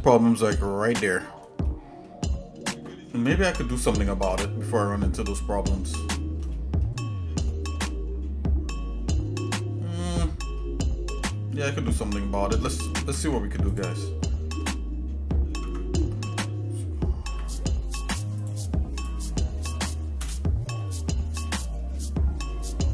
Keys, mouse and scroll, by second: 1.6 shift+middle click, 2.9 shift+middle click, 3.4 middle click, 4.7-6.4 shift+middle drag, 6.5 middle click, 7.0 scroll down 1, 7.5-10.1 shift+middle drag, 10.2 middle click, 10.8 scroll up 1, 11.3 shift+middle click, 13.0 ctrl+Tab, 14.1 scroll up 1, 14.6 scroll down 1, 15.5 ctrl+Tab, 17.3 k, 20.8 middle click, 21.4 middle click.